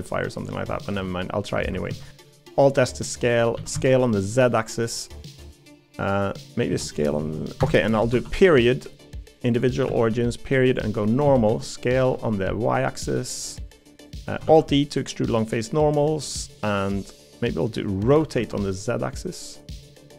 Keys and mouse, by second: 1.1 middle click, 1.9 alt+s, 3.5 s, 5.6 middle click, 6.7 s, 11.2 s, 14.4 alt+e, 18.1 r.